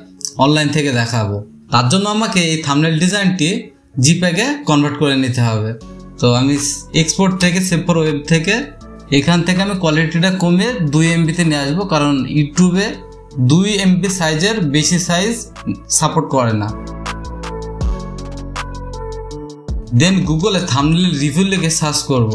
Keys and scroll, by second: 14.7 Up, 14.9 Up, 16.1 typing, 17.6-20.1 typing.